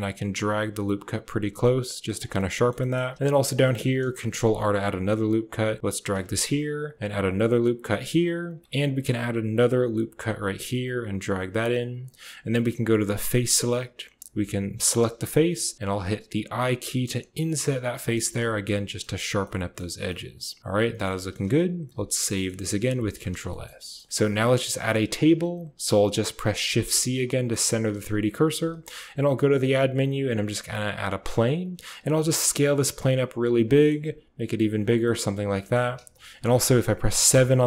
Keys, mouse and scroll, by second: 2.3 click, 2.7 shift+middle click, 2.8 shift+click, 3.1 shift+click, 3.5 shift+click, 4.1 ctrl+r, 6.2 ctrl+r, 8.5 ctrl+r, 13.1 click, 14.7 click, 15.7 i, 18.6 click, 19.0 Tab, 19.3-19.7 drag, 20.0-20.6 drag, 20.6-20.9 middle drag, 21.1 shift+middle click, 21.8 ctrl+s, 22.2 click, 22.9 ctrl+s, 23.4 shift+click, 23.8 click, 24.2 a, 24.7 click, 26.7 shift+c, 27.4-27.9 drag, 31.8 s, 33.6 click, 33.9 s, 34.9-35.6 drag, 37.2 KP_7.